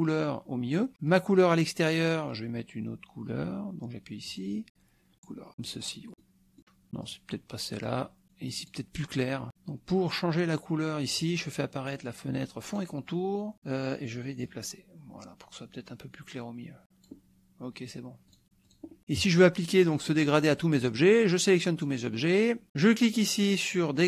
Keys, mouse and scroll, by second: 1.1 click, 4.3 click, 5.7 click, 6.1 click, 7.1 click, 8.2 click, 8.5 click, 12.7 click, 14.6-17.3 drag, 18.3 click, 18.7 click, 19.0 KP_Subtract, 19.8 middle click, 21.1 click.